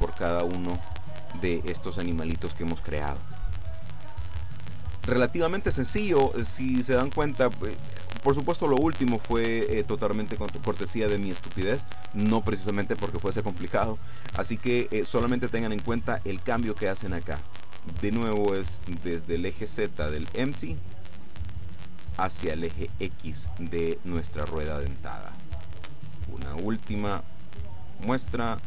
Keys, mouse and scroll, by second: 20.3 right click, 21.6 right click, 26.1-27.6 shift+middle drag, 28.3 right click.